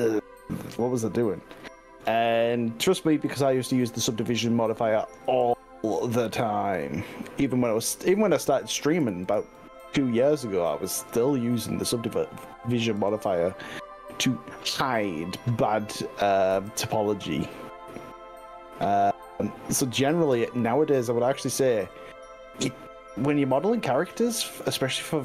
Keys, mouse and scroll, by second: 0.9 scroll up 2, 1.5 scroll down 1, 1.9-2.3 scroll up 3, 3.3 click, 5.3 g, 8.8 click, 9.1 ctrl+z, 9.5 ctrl+z, 10.9 click, 10.9 g, 11.7-12.7 scroll down 7, 13.0 s, 13.3-13.7 scroll down 3, 16.5 y, 19.0-20.1 scroll up 6, 21.3-22.7 scroll up 7, 23.0 scroll up 3, 23.8 click, 24.7 ctrl+z, 24.9 ctrl+z.